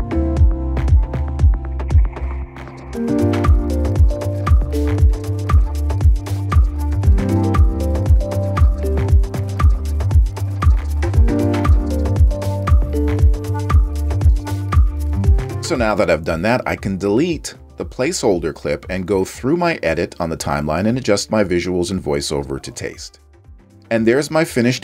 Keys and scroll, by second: 1.9 w, 2.1 space, 2.5 space, 2.8 space, 4.3 space, 5.3 space, 5.7 space, 6.6 space, 6.9 space, 8.2-12.1 typing, 13.8 super+=, 14.1 space, 14.8 space, 20.1 BackSpace.